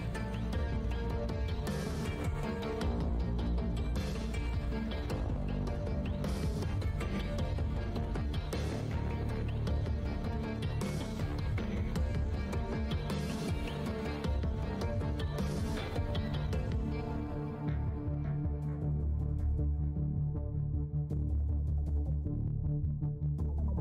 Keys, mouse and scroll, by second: 0.0 click, 1.3 shift+right click, 2.6 click, 2.8-3.1 scroll up 1, 3.7-4.4 scroll, 5.0 w, 6.2 `, 8.8 w, 10.7 space, 11.8 click, 12.2 w, 13.1 click, 13.4 space, 13.7 scroll down 1, 13.8 r, 15.9 scroll down 1, 16.1-18.6 scroll up 1, 23.1 shift+scroll, 23.1-23.5 shift+scroll down 1.